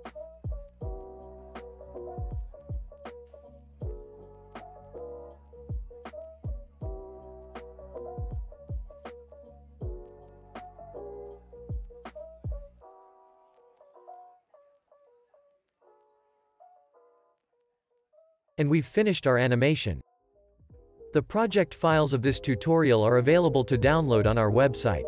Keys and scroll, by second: 4.9 o, 11.1 o, 12.3 super+s, 20.0 space.